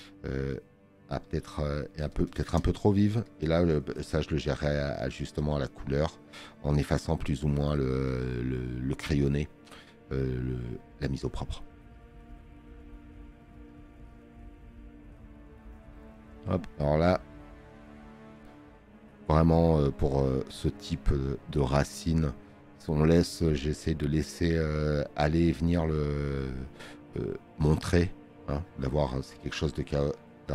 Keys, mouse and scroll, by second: 10.9-11.9 drag, 10.9 space, 12.3 scroll up 2, 13.1 click, 13.1 space.